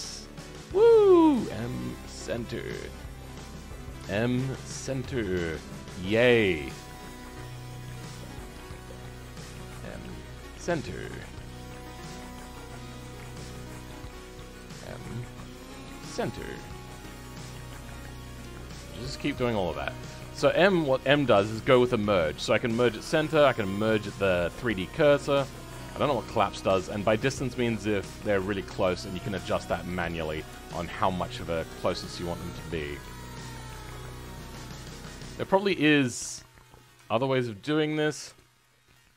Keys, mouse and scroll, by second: 4.5-7.1 shift+middle drag, 7.1 click, 13.2-15.7 shift+middle drag, 15.7 m, 20.7 click, 38.6 m, 38.9 middle click.